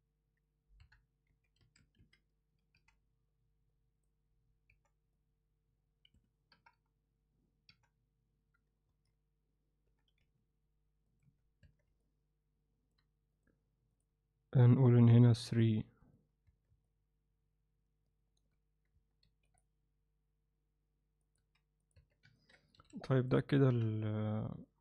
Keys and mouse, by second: 0.8 KP_3, 1.3 z, 1.6 a, 2.8 c, 6.5 ], 7.8 f, 8.9 ctrl+z, 9.9 g, 11.2 z, 11.6 Tab, 12.0-12.9 alt+middle drag, 15.4 click, 16.0 click, 16.5 Tab, 16.9-18.4 alt+middle drag, 19.2 ctrl+r, 21.4 x, 22.0 Tab, 22.4 ctrl+alt+middle click, 22.8 alt+a, 23.0 alt+middle drag, 23.7 KP_1, 24.6-24.8 alt+middle drag.